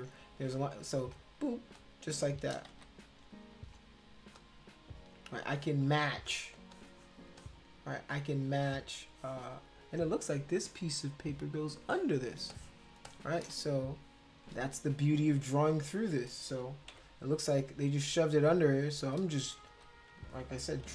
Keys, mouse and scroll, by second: 1.0 click, 1.8 shift+click, 2.7 ctrl+z, 3.5 click, 4.3 shift+click, 6.5 space, 6.7 click, 7.4-9.5 drag, 11.9 space, 12.5 click, 13.1 click, 13.6 ctrl+z, 15.2 click, 16.9 ], 17.5 click, 18.5 shift+click, 19.7 ctrl+z, 20.8 [.